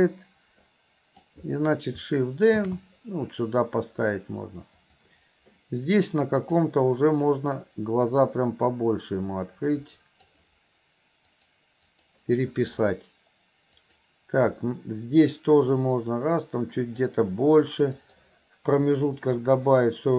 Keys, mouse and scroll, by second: 6.5 click, 8.2-10.3 drag, 11.4 click, 12.0 click, 13.9 click, 15.7-17.0 drag, 18.1 click, 19.3 click.